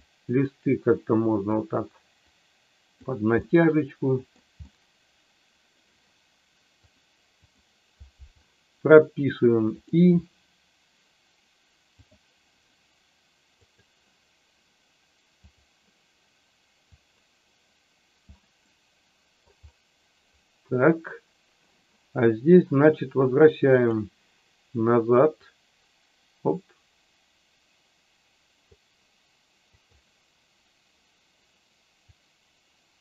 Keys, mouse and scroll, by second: 0.6 click, 2.2 click, 3.4-4.4 middle drag, 4.7-5.8 middle drag, 6.9 click, 9.7 click, 13.6 click, 15.4 click, 16.8-18.2 drag, 18.7 middle click, 23.7 click, 25.3-28.6 drag, 29.7 click, 32.1-33.0 drag.